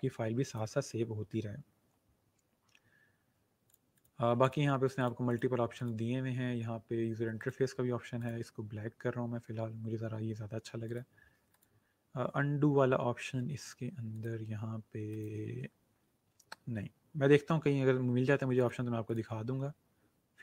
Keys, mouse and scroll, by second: 0.4 click, 3.6 click, 10.8 click, 14.1 click, 18.5 click.